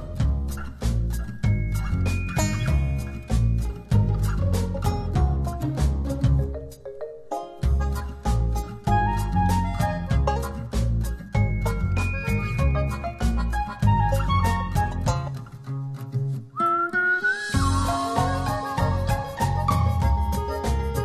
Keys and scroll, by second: 17.7 space.